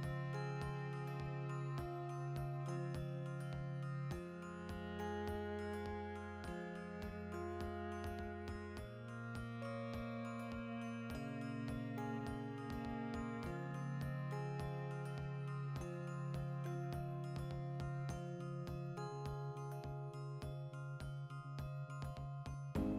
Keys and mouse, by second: 1.9 click, 5.0 ctrl+middle click, 6.2 shift+click, 6.8 Tab, 6.9-7.9 shift+middle drag, 7.9 right click, 8.1-12.0 ctrl+middle drag, 11.3 alt+q, 12.0 alt+right click, 12.5 v, 13.2 l, 13.4 x, 13.9-15.8 ctrl+shift+middle drag, 15.8 right click, 16.7 alt+o, 17.6 ctrl+middle click, 18.2 alt+right click, 18.5 ctrl+shift+middle click, 19.2 alt+shift+right click, 19.5 v, 20.0 l, 20.2 x, 21.0 Tab, 21.7 a.